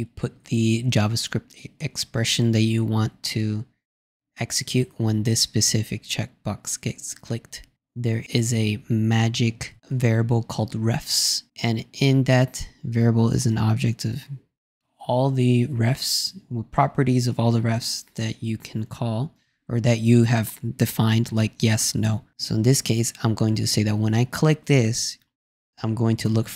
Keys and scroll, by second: 8.1 shift+4, 8.4 shift+r.